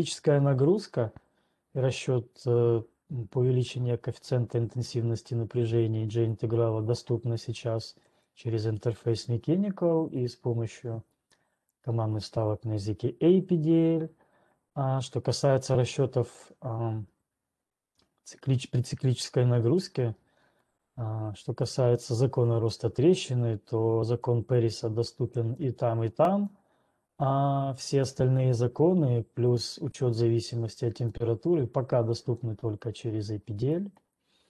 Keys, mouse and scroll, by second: 5.2 click, 6.2 click, 9.7 click, 25.2 click, 25.7 click, 26.7 click.